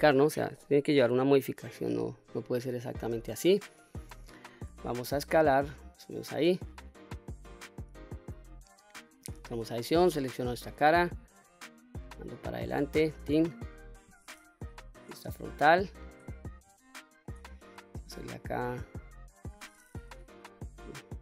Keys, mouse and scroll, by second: 1.7-2.3 scroll up 3, 2.3-3.1 middle drag, 3.6-4.0 middle drag, 4.5 s, 5.9 click, 6.4-7.3 middle drag, 7.6 scroll up 1, 8.1-8.6 middle drag, 9.2 Tab, 9.8 click, 11.2-12.9 drag, 13.3-13.7 middle drag, 14.4 KP_1, 15.5 shift+middle click, 16.2 scroll up 2, 16.7-17.0 shift+middle drag, 17.3 scroll up 1, 17.8 shift+middle drag, 20.1 KP_9.